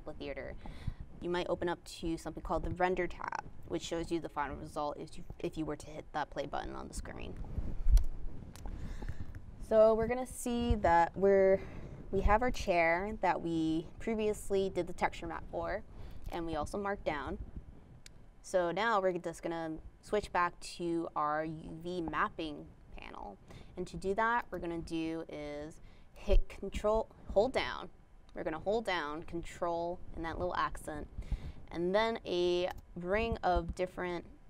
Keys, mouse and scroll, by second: 23.2 ctrl+`, 26.7 click, 27.5 ctrl+`.